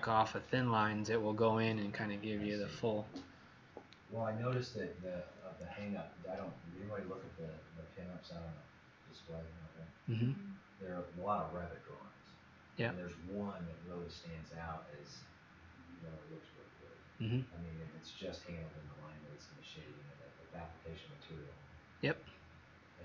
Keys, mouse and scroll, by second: 4.1-4.6 scroll down 5.